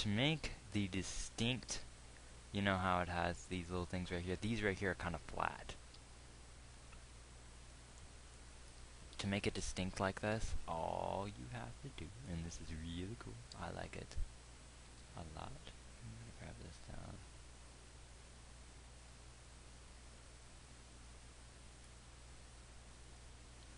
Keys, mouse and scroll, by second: 6.3 g, 15.5 g.